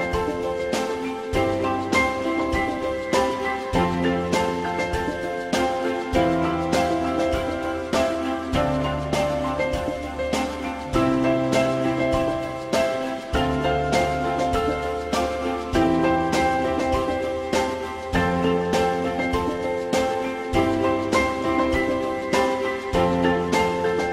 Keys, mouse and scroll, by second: 11.8 click.